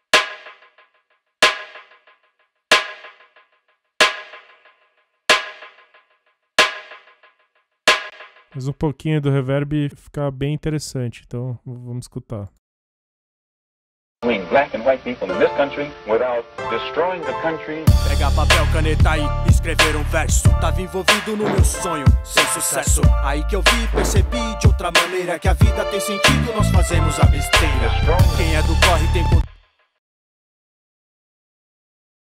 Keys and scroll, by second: 8.1 space, 13.7 space, 29.5 space.